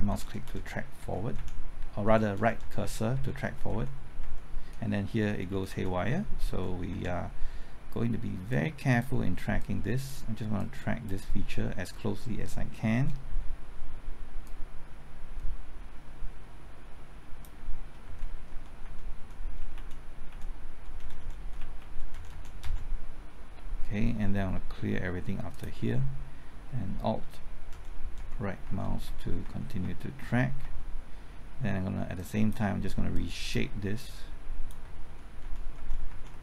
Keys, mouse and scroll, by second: 0.0-0.1 typing, 5.3 Left, 5.5-6.9 typing, 8.5 click, 12.4-13.5 middle drag, 14.5-17.5 drag, 18.0 Right, 18.8 Right, 19.2 Right, 19.6 typing, 21.0 Right, 21.4 Left, 22.1 Right, 25.5 click, 26.9 typing, 27.7 alt+Right, 28.2-29.4 typing, 29.0 alt+Right, 32.2-34.8 drag, 35.0 alt+Right, 35.4 alt+Right, 35.8 alt+Right, 36.1 alt+Right.